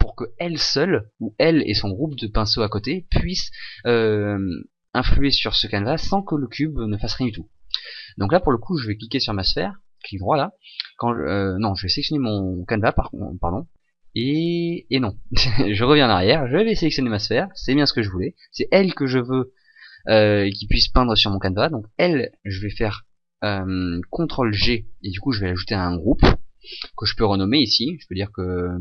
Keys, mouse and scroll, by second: 8.7 right click, 11.6 right click, 16.9 right click, 24.6 ctrl+g, 27.4 click.